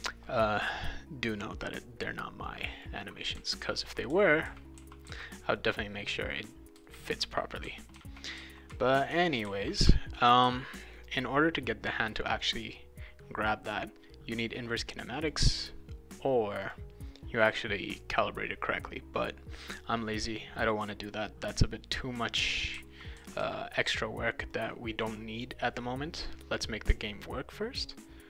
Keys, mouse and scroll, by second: 0.0-1.2 drag, 2.4 click, 3.0-5.6 right drag, 3.1-5.6 typing, 6.7-10.4 typing, 6.8-10.9 right drag, 15.2 click, 16.6 click, 19.8-20.9 drag, 21.9-23.9 right drag, 22.5-23.9 typing, 24.5 click, 26.5-27.8 drag.